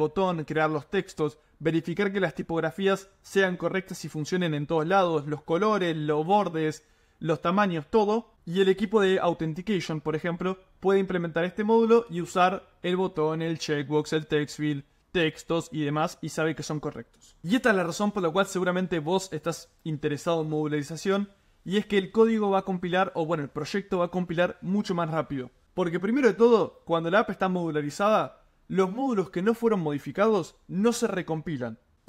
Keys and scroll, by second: 17.4 super+m.